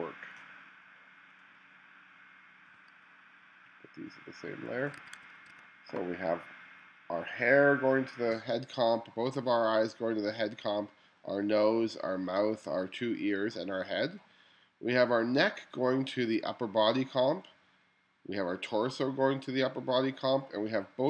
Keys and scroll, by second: 5.1 1.